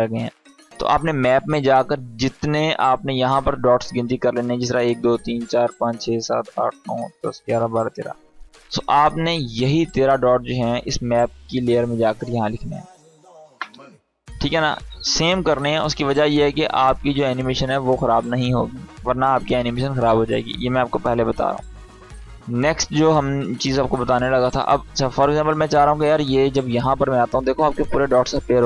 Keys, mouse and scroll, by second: 0.4 click, 8.7 click, 15.1 ctrl+z, 17.2 click, 17.8 ctrl+z, 20.9 click, 24.8-26.6 drag.